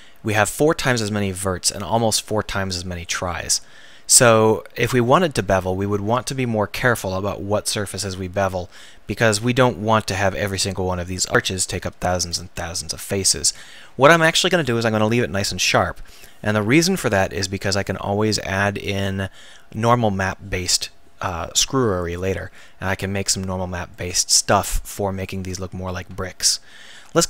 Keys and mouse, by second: 2.9-3.5 middle drag, 4.6-7.0 middle drag, 10.2-12.4 drag, 24.8 Tab.